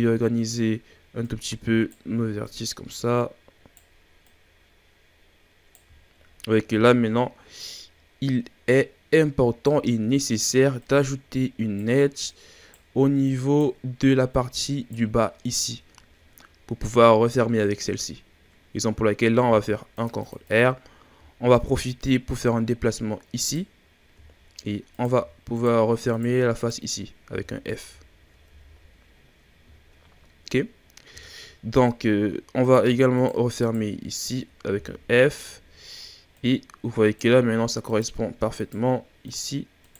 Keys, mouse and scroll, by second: 1.3 right click, 2.4 right click, 4.3 right click, 5.9-7.6 shift+scroll down 7, 7.6 right click, 10.2-10.8 shift+scroll up 4, 10.8 right click, 12.3 right click, 13.2 right click, 14.3 right click, 15.4-16.0 scroll down 7, 16.0-17.0 scroll up 1, 17.0-19.1 scroll up 1, 19.5 ctrl+r, 20.4-20.7 drag, 20.7-21.2 scroll up 3, 21.2-22.0 shift+scroll down 5, 22.0 right click, 23.9-24.2 scroll down 3, 24.2-24.9 shift+scroll up 5, 24.9 right click, 25.5 shift+right click, 26.1 shift+right drag, 26.5 shift+right click, 27.3 f, 28.0-28.4 shift+scroll down 2, 28.4 a, 28.7-29.7 scroll down 5, 29.7-31.2 shift+scroll up 8, 31.2-32.6 shift+scroll down 4, 32.6 right click, 33.2 shift+right drag, 33.6 shift+right drag, 34.1 shift+right click, 34.8 f, 35.2-36.3 ctrl+scroll down 3, 36.3 right click, 37.8 right drag, 38.6 shift+right drag, 39.2 shift+right drag, 39.8 shift+right click.